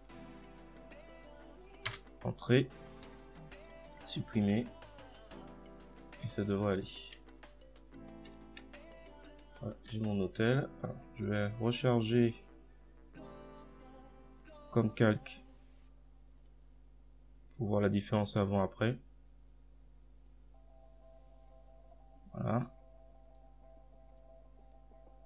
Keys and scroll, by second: 1.2 Delete.